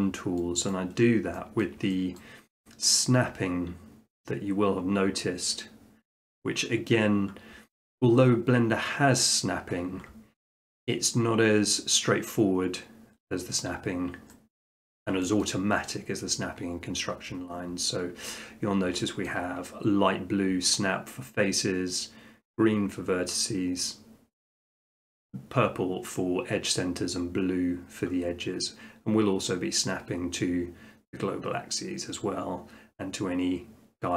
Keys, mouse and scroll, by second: 0.7 click, 1.6 shift+middle click, 2.2 middle click, 14.6 middle click, 15.1 shift+middle click, 15.4 middle click, 18.5 middle click, 18.7 middle click, 19.3 shift+middle click, 28.1 middle click.